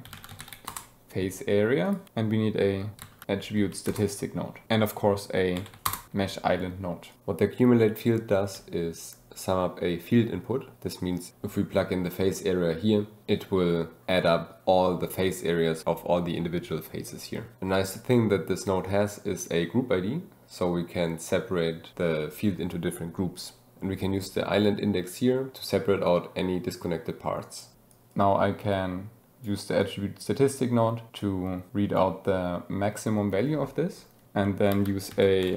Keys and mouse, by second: 1.8 click, 4.7 shift+a, 5.8 Down, 7.1 click, 8.1 click, 15.0-15.8 drag, 23.6 click, 27.9 click, 28.1-29.4 drag, 29.8 click, 31.2-32.0 drag, 34.7 shift+a.